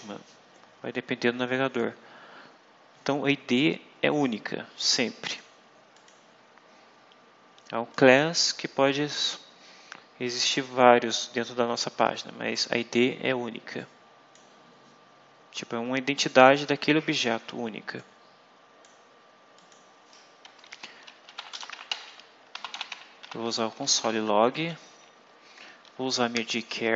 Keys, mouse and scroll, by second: 4.0-5.5 drag, 5.9 click, 6.7 scroll up 2, 7.8 click, 12.3 scroll down 2, 13.7 click, 16.1 click, 17.9 click, 19.5 click, 20.6 Return, 20.9-24.2 typing, 24.3 shift+Left, 26.3 shift+4.